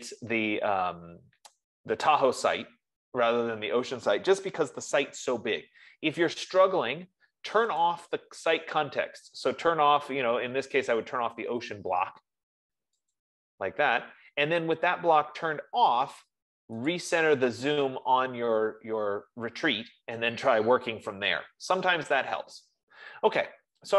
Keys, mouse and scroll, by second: 8.1-13.3 drag, 13.7-18.7 drag, 21.2 F15, 21.7 Escape.